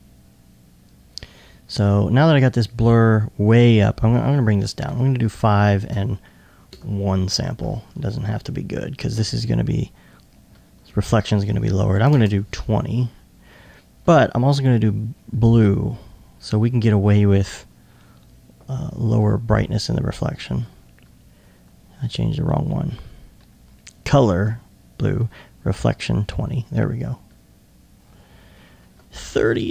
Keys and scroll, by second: 4.9 Tab, 12.2 ctrl+space, 13.6-14.3 typing.